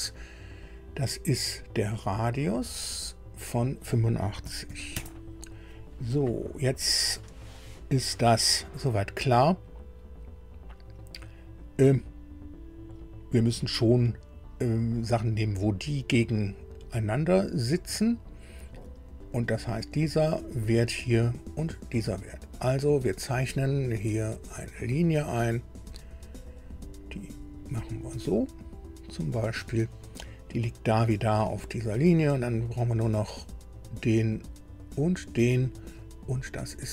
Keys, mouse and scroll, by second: 1.5 click, 2.7 click, 4.4 KP_8, 4.7 KP_5, 4.9 KP_Enter, 6.6 click, 7.7 scroll up 2, 24.5 click, 26.5 click, 29.2 click, 30.4 scroll up 2, 31.6 right click, 33.8 click, 35.0 click.